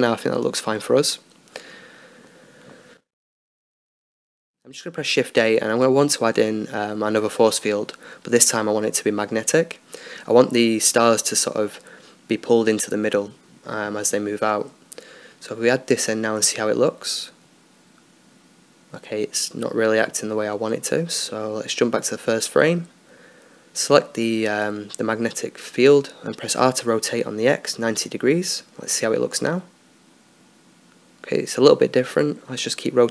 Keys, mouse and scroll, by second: 1.5 Escape, 2.7-4.2 right drag, 2.7 x, 4.2 shift+a, 9.5-11.0 middle drag, 10.4-14.0 drag, 12.4 middle click, 13.2-14.8 right drag, 14.8 alt+a, 14.8-15.8 middle drag, 18.5-20.0 middle drag, 22.4-25.4 drag, 23.9-25.4 right drag, 24.4-26.5 middle drag, 26.0 r, 29.5 alt+a, 30.8-32.2 right drag.